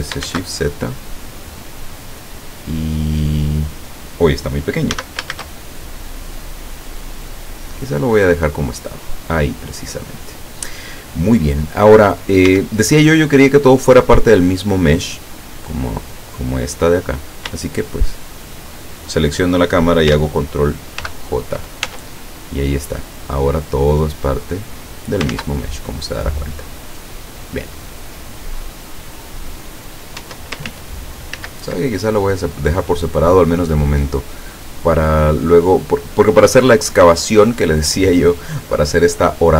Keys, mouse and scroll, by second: 0.3 shift+z, 2.4 click, 5.0 s, 5.4 shift+z, 7.9 click, 9.2-10.2 middle drag, 11.6 scroll down 2, 12.5 Tab, 17.7 shift+right click, 21.1 ctrl+j, 21.9 ctrl+Tab, 22.9-23.3 scroll up 2, 24.3-25.3 drag, 25.3 ctrl+z, 27.9-30.3 middle drag, 30.2 Tab, 30.7 ctrl+z, 31.8 ctrl+z, 31.8 ctrl+right click, 36.2 click, 36.9 click, 38.0 click, 38.8 click.